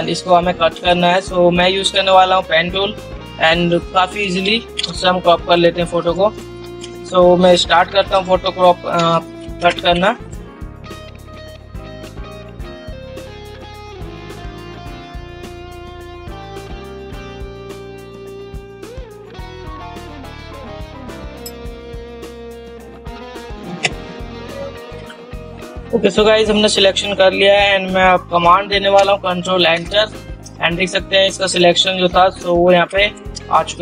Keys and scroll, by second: 0.0 ctrl++, 4.7 ctrl++, 11.3 ctrl+alt+z, 11.6 ctrl+alt+z, 12.8 ctrl+alt+z, 13.4 ctrl+z, 13.6 ctrl+z, 14.2 ctrl+z, 16.3 ctrl+alt+z, 18.0 ctrl+z, 19.6 ctrl+z, 20.2 ctrl+alt+z, 21.1 ctrl+alt+z, 21.5 ctrl+alt+z, 22.2 ctrl+alt+z, 22.6 ctrl+alt+z, 24.1 ctrl+0, 30.1 ctrl+Return, 31.9 ctrl++.